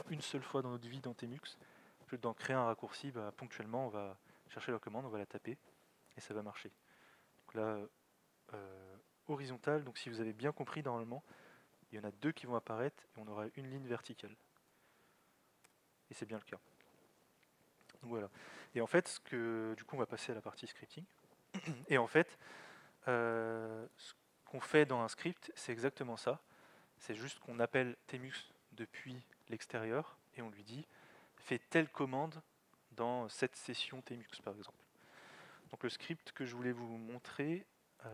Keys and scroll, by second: 6.6-7.3 typing, 14.7 typing.